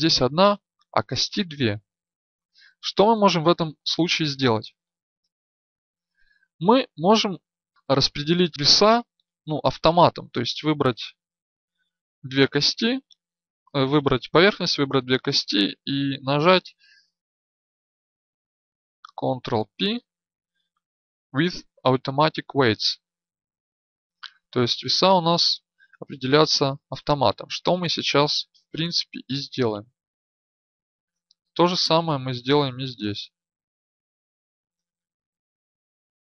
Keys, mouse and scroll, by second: 19.6 ctrl+p, 32.3-35.6 right drag.